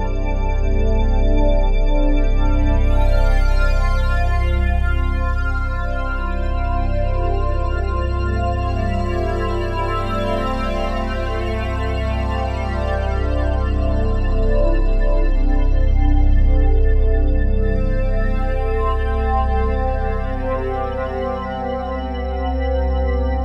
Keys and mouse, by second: 0.8-4.1 drag, 4.7-5.7 shift+drag, 5.8 ctrl+l, 7.0 Return, 8.5 alt+a, 9.0-9.6 ctrl+alt+drag, 11.1-14.6 ctrl+alt+drag, 14.7-15.4 shift+drag, 15.8 ctrl+l, 16.8 Return, 17.3 ctrl+s, 18.2-20.4 ctrl+alt+drag, 21.1-23.4 drag.